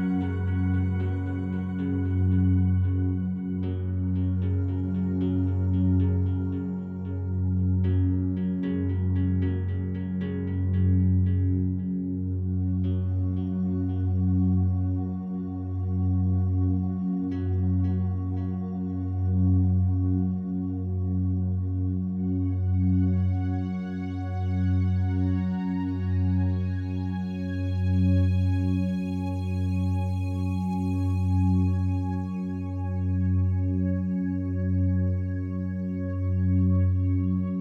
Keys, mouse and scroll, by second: 0.2 ctrl+z, 1.7-2.9 drag, 3.0 click, 3.6-5.2 drag, 6.1 click, 7.4 alt+a, 7.7 b, 8.1-9.8 drag, 9.8 Delete, 10.8-13.4 drag, 14.0-17.4 drag, 17.9 click, 18.9 click, 20.2 click, 21.0-22.7 drag, 24.9 click, 26.8 b, 27.0-29.5 drag, 29.4 b, 29.9 click, 31.2 ctrl+alt+shift+click, 31.7 alt+shift+click, 32.6-33.7 typing, 32.7-35.0 alt+drag, 35.0 typing.